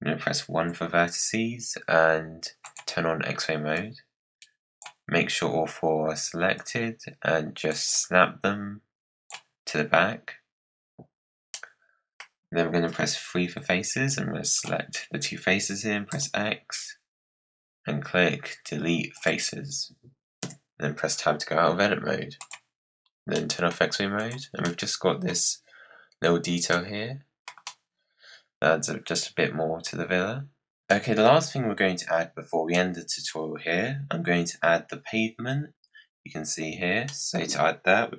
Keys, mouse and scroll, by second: 0.5 1, 2.5-3.7 drag, 6.5-7.9 drag, 11.4 middle click, 12.1-13.4 scroll down 2, 13.4 3, 14.0 click, 16.0 x, 20.3 Tab, 21.2-21.5 scroll down 4, 22.3 click, 23.3 middle click, 23.6 scroll down 4, 24.1 click, 24.5-27.4 middle drag, 27.4 scroll down 4, 27.6-30.6 middle drag, 30.8 middle click, 31.3-32.7 scroll down 6, 32.7-35.7 middle drag, 37.0-38.1 middle drag.